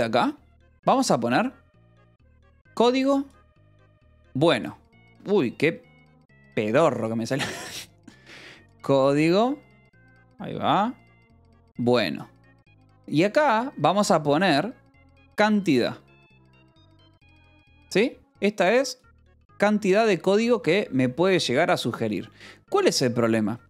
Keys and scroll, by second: 6.7 ctrl+z.